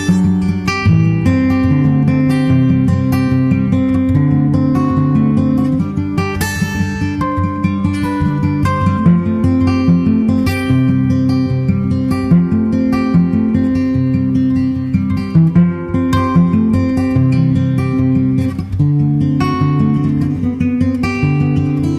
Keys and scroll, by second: 2.2 super+Tab, 9.3 super+c, 10.3 shift+super+Left, 10.7 super+v, 11.5 super+s, 14.6 super+Left.